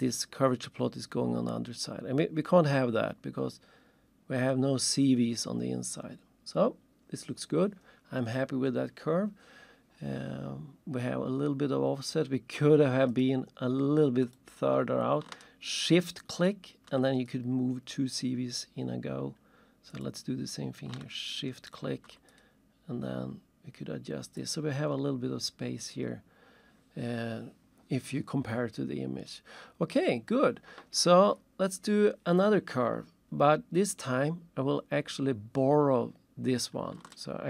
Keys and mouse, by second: 13.1 click, 14.3 click, 16.3 shift+click, 17.2 shift+click, 18.6 click, 20.9 click, 21.6 shift+click, 22.3 shift+click, 24.4 click, 37.1 ctrl+shift+click.